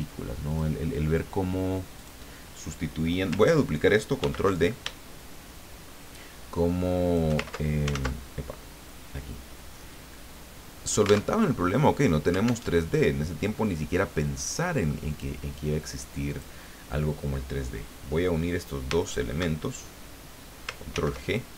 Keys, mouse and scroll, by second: 0.5 click, 1.9 click, 4.2 ctrl+d, 5.2-7.3 shift+drag, 7.9 ctrl+z, 8.9-11.3 drag, 11.3 alt+Tab, 12.7 alt+Tab, 15.1 click, 16.3 click, 19.0 shift+click, 20.9 ctrl+g.